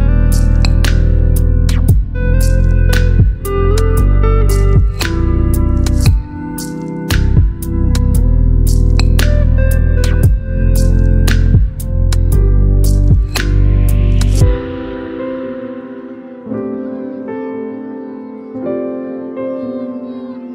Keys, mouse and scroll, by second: 2.1-3.5 scroll down 1, 5.9-6.3 scroll up 1, 6.3 click, 8.9 shift+click, 10.9 click, 13.7 ctrl+g, 18.5 ctrl+g, 18.5 click, 20.3 right click.